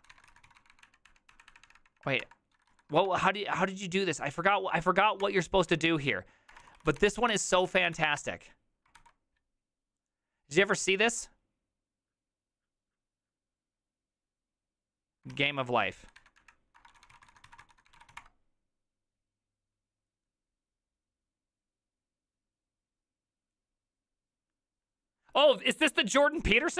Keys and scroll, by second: 0.1-2.7 typing, 1.5 Up, 5.2 Return, 5.7 ctrl+c, 6.3-7.5 typing, 7.7 ctrl+alt+t, 8.0 ctrl+v, 8.2 Return, 9.0 alt+f, 15.3 alt+{, 16.2-18.6 typing, 16.4 Up.